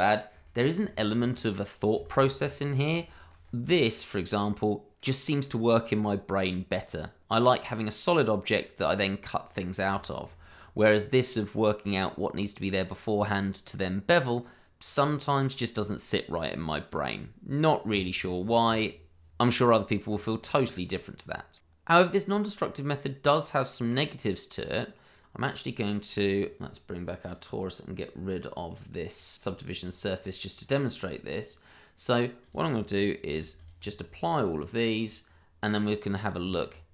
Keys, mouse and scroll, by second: 0.4 shift+middle click, 0.5 middle click, 0.6 shift+middle click, 2.6 middle click, 3.0 shift+middle click, 3.4 scroll up 1, 3.6 middle click, 6.5-7.4 scroll down 1, 9.6 scroll down 1, 9.9 shift+middle click, 10.5 click, 10.7 middle click, 16.4 middle click, 17.0-17.9 scroll up 1, 17.9 Tab, 19.3 alt+s, 19.9 Tab, 20.9 middle click, 21.4 shift+middle click, 21.6 middle click, 22.4 shift+middle click, 23.8 click, 26.9 click, 30.7-31.4 scroll up 1, 32.4 click, 33.3 h, 33.5 click, 36.4 Tab.